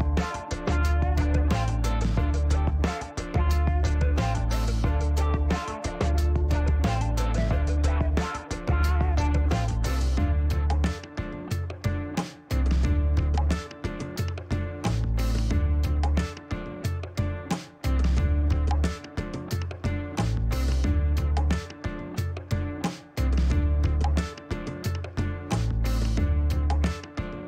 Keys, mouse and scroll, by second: 2.8 KP_1, 2.9 KP_2, 4.4 KP_Enter, 6.0-7.2 drag, 7.4 middle click, 8.3 click, 8.9 click, 10.6 Delete, 12.7 click, 14.9 click, 15.4 click, 16.3 Delete, 18.5 click, 20.2 click, 22.6 click, 24.4 2, 24.5 0, 24.8 Return, 26.4-27.4 drag.